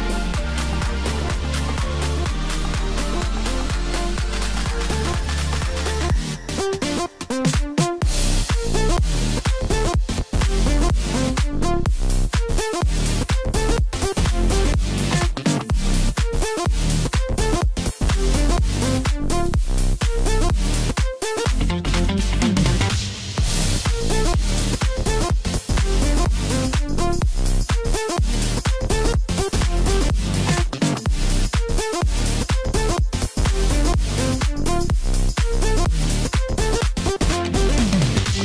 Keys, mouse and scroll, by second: 0.2-0.5 scroll down 1, 0.5-1.1 middle drag, 1.1-1.7 scroll up 2, 1.7 click, 2.1-2.5 scroll up 1, 3.1 Tab, 3.7-6.6 middle drag, 6.6 ctrl+r, 12.4 ctrl+r, 18.1 ctrl+r, 21.8 scroll up 3, 22.0 scroll down 4, 22.3-25.4 middle drag, 25.4 Tab, 25.6 scroll down 1, 25.9-26.5 middle drag, 26.5-28.6 scroll up 2, 28.6-31.4 drag, 31.4-32.5 scroll up 2, 32.5 drag, 33.5-36.5 drag, 37.1 KP_Divide, 37.8-38.4 scroll down 7.